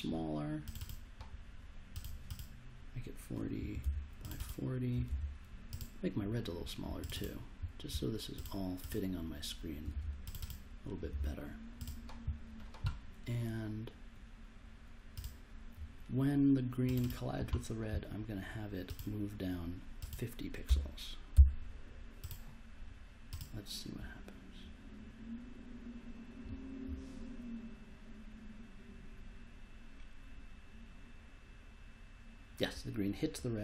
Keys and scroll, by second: 3.3-4.3 typing, 9.5-11.6 typing, 20.6 BackSpace, 21.3 5.